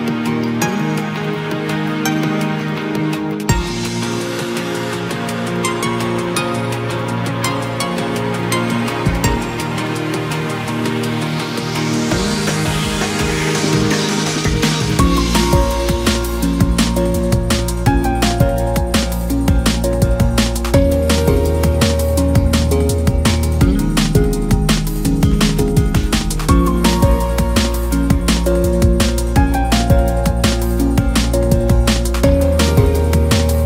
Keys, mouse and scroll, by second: 0.6 1, 1.0-1.4 scroll down 1, 1.4 a, 2.1 s, 3.4-3.9 scroll down 1, 3.9 click, 4.4-5.2 scroll down 1, 5.3 click, 5.5 scroll up 2, 5.8-6.5 scroll down 1, 6.5 KP_3, 6.8-7.5 scroll up 1, 7.5 e, 7.9 s, 9.7 s, 14.3-15.3 scroll down 2, 15.3 2, 15.8 KP_1, 16.1-16.8 scroll down 5, 16.8 shift+middle click, 17.2-17.5 scroll up 1, 17.5 e, 18.5-18.8 scroll down 3, 18.8 g, 20.3-21.2 scroll up 2, 21.2 s, 22.5 ctrl+r, 24.4-24.7 scroll up 1, 24.7 s, 27.2 g, 28.9 ctrl+b, 30.4 scroll down 2, 30.5 middle click, 31.3-31.9 scroll up 1, 31.9 click, 32.7 ctrl+f.